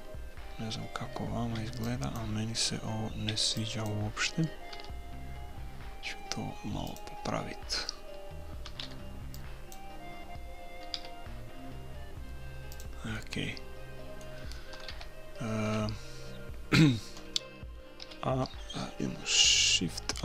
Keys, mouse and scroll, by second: 1.5 b, 3.3 b, 4.7 s, 8.6 a, 8.9 b, 11.0 s, 13.1-14.8 middle drag, 14.8 KP_3, 15.7 KP_1, 18.0 a, 20.1 shift+a.